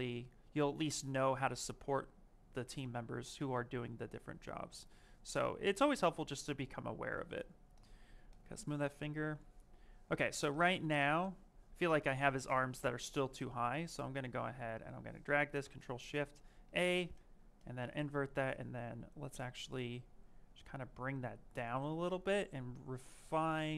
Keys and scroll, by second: 15.5 ctrl+shift+a.